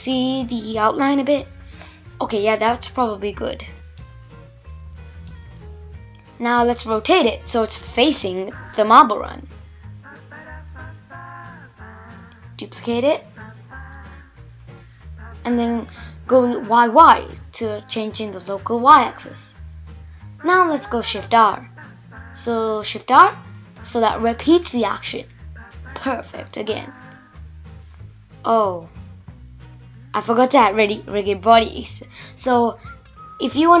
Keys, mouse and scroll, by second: 0.1 scroll down 1, 0.4-2.7 middle drag, 2.7 click, 3.5-4.3 scroll down 2, 4.3 r, 9.2 shift+d, 21.2 shift+r, 21.7 shift+r, 22.1 shift+r, 22.5 shift+r, 23.0-25.3 middle drag, 25.3 click, 25.9 click, 27.0 click, 29.2-31.0 drag, 32.3-33.6 drag.